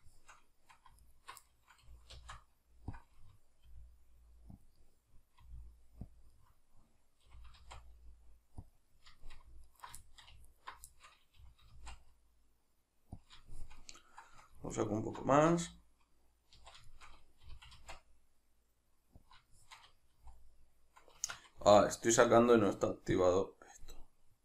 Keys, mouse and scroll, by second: 0.1 shift+middle click, 1.0 alt+right click, 1.5-3.0 middle drag, 1.9 g, 3.0 click, 3.2-4.7 middle drag, 3.7 r, 4.7 click, 4.8-6.2 middle drag, 5.4 r, 6.2 click, 6.4-8.8 middle drag, 7.3 g, 8.8 click, 8.9 middle click, 9.7 alt+right click, 10.0 shift+middle click, 10.5 alt+right click, 11.0-13.3 shift+middle drag, 11.4 g, 13.3 click, 13.5-14.7 shift+middle drag, 14.7 alt+right click, 15.5 z, 16.9-19.3 shift+middle drag, 17.4 g, 19.3 click, 19.5-22.1 shift+middle drag, 20.1 z, 22.1 right click, 23.1-23.9 drag, 23.9-24.4 middle drag.